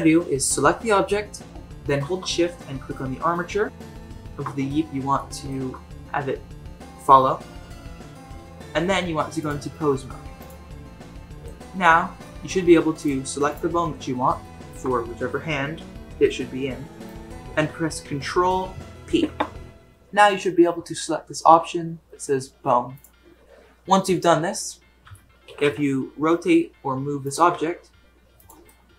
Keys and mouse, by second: 5.1-5.5 shift+middle drag, 9.4-10.5 drag, 12.2 middle drag, 13.4 click, 14.4 shift+middle drag, 19.0 ctrl+p, 25.4 r, 27.5 g, 28.7-28.9 middle drag.